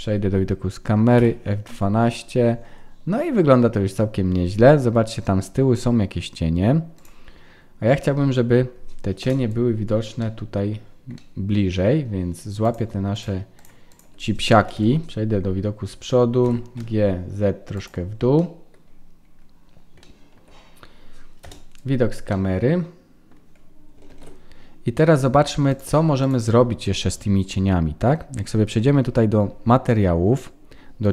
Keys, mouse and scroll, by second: 1.3 F12, 8.3-9.2 scroll down 1, 9.2 KP_0, 10.1 scroll up 1, 10.2 middle click, 10.6-11.1 scroll down 6, 11.1 scroll up 1, 11.1 middle click, 12.1-12.7 scroll up 2, 12.6 click, 13.1 shift+click, 14.7 KP_1, 15.5-16.2 scroll up 3, 16.2 scroll up 1, 16.4 g, 18.4 middle click, 18.9-19.9 scroll down 7, 20.0 shift+middle click, 21.4 KP_0, 22.3 middle click, 24.1 ctrl+s, 25.7 click, 27.6 click, 27.6-29.1 scroll down 5, 29.1-29.9 scroll down 11, 29.9-31.1 scroll up 17.